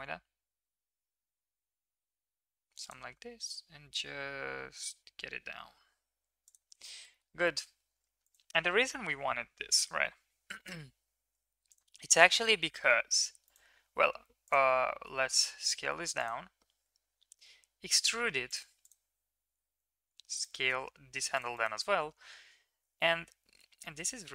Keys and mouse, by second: 6.6 click, 7.1 shift+middle click, 7.4 middle click, 12.3 g, 14.4 click, 15.0 s, 17.2 e, 20.6 s, 21.5 middle click, 22.7 g.